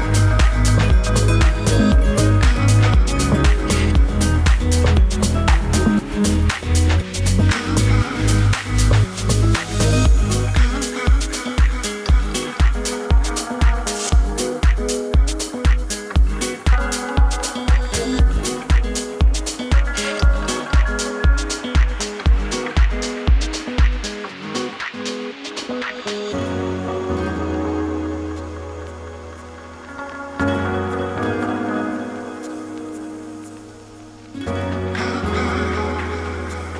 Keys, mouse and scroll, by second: 2.6-9.3 drag, 10.0 0, 10.2 Return, 11.8-18.1 drag, 18.5-20.7 typing, 21.9 click, 22.0 typing, 27.2 middle click, 30.0-36.7 drag.